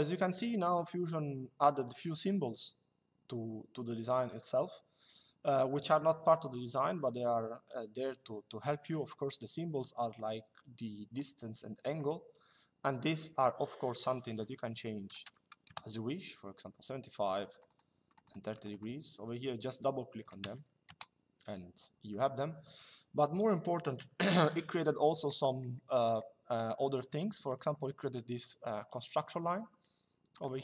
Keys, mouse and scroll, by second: 13.5 click, 14.8 KP_7, 17.2 click, 19.9 KP_3, 20.6 Return, 27.2 click, 30.0 click.